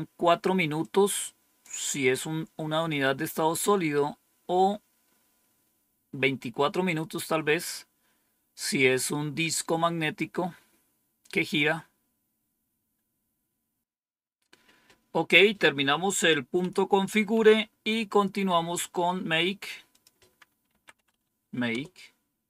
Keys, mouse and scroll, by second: 0.7 click, 16.0 click, 16.5 Page_Up, 17.2 Page_Down, 18.1-19.0 scroll down 2, 19.8 click, 20.4-21.5 typing, 21.6 Return.